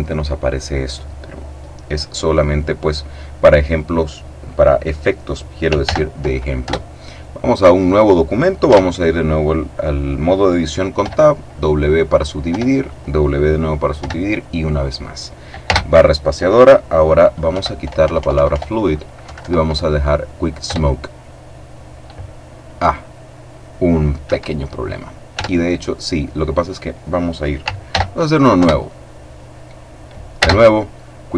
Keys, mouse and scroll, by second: 5.5 ctrl+n, 6.2 ctrl+Return, 8.3 Tab, 10.7 w, 11.5 click, 12.2 w, 12.5 click, 13.7 w, 14.0 click, 15.3 space, 17.2 End, 17.5 BackSpace, 18.9 Down, 20.3 Return, 24.0 Escape, 25.0 Tab, 27.5 ctrl+n, 28.2 ctrl+Return, 30.0 space, 31.2 click.